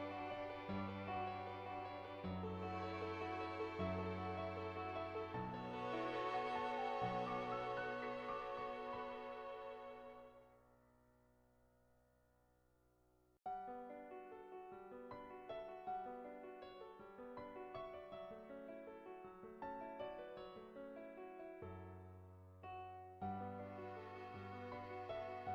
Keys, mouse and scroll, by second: 0.2 ], 0.4 click, 1.0 click, 1.3 click, 1.8 [, 2.1 [, 2.4 [, 2.5 [, 2.7-4.5 drag, 5.8 [, 6.0 [, 6.4 click, 7.3 ctrl+z, 7.7-9.4 drag, 11.0-12.2 drag, 12.7 click, 13.7 shift+click, 14.2 shift+click, 14.8-18.8 drag, 21.3-22.5 shift+drag, 22.7 shift+click.